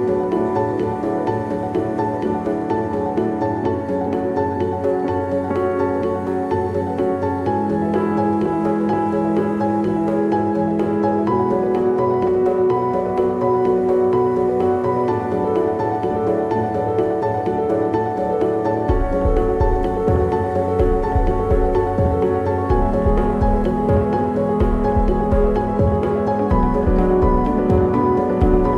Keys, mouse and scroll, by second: 2.1 s, 7.3 s, 7.4 g, 12.6 KP_0, 14.0 g, 17.7 KP_0, 19.9 g, 21.3 g, 21.9 click, 22.2 g, 26.9 Tab, 27.9-28.7 drag.